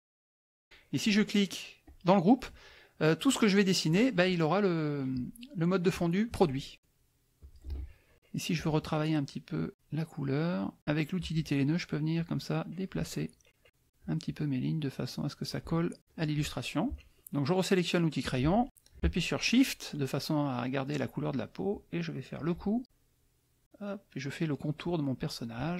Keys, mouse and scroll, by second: 0.0-0.1 typing, 1.8 click, 7.4 click, 8.5 click, 12.1 click, 13.7 click, 16.0 middle click, 18.2 click, 18.7 click, 21.7 shift+click, 22.8-25.7 shift+drag.